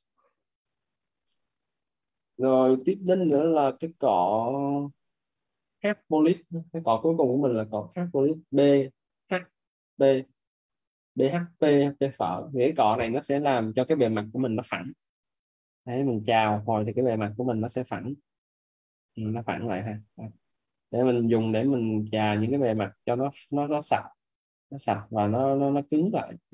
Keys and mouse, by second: 8.7 b, 9.1 h, 9.8 p, 13.2 alt+right click, 15.1 click, 17.9 click, 23.0 right click, 24.5 right click, 25.3 click.